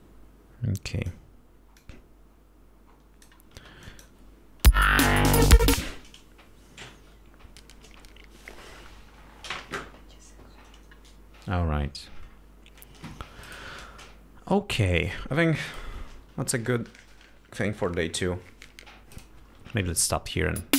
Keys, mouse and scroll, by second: 2.2-3.8 drag, 4.0 space, 4.2 click, 5.1 space, 6.2 space, 20.4 click.